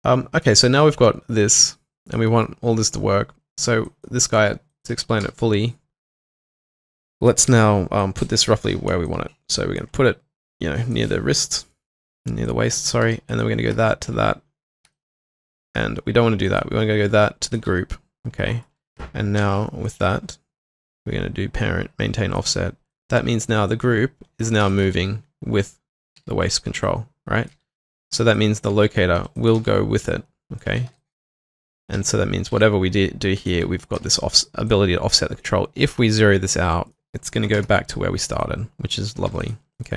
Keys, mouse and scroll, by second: 2.0 double click, 5.2 typing, 8.9 w, 9.1 alt+click, 11.1 alt+click, 13.7 q, 17.5 ctrl+click, 19.4 shift+click, 24.7 shift+click, 26.2 typing, 27.9-29.6 typing, 30.5 double click, 30.9 typing, 32.0-32.5 typing, 34.0 typing, 37.4 typing, 37.5 Return, 38.4 alt+click, 39.3-39.9 typing, 39.7 double click.